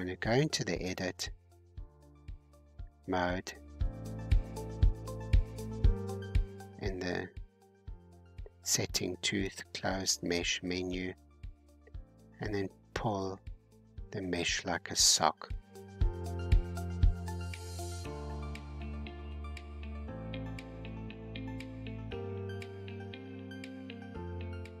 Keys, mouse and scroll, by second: 3.2 click, 3.5 g, 5.1 click, 5.4 g, 7.0 scroll down 3, 8.2 click, 8.6 g, 10.5 click, 10.8 g, 13.8 click, 14.2 g, 18.9 click, 19.5 g, 22.6-23.0 scroll down 2, 23.0-24.8 middle drag.